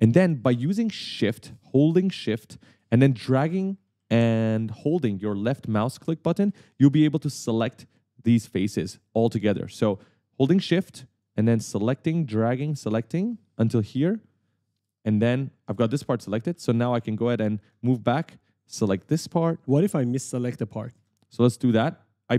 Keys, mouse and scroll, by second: 0.2-1.1 typing, 0.3 right click, 3.7 right click, 3.9 w, 4.6 w, 6.2-7.4 typing, 6.4 right click, 11.3 shift+click, 15.1 right click, 15.5-17.5 typing, 18.4 shift+click, 19.8 right click, 21.6 shift+click.